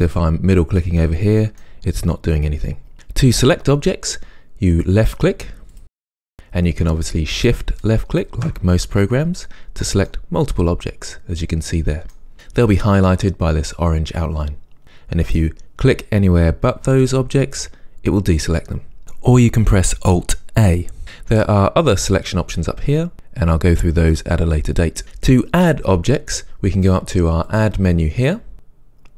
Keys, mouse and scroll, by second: 0.8-2.0 middle drag, 5.0 click, 6.0 drag, 7.4 shift+click, 8.1 shift+click, 10.1-15.3 middle drag, 15.3 click, 22.2 click, 27.5 click.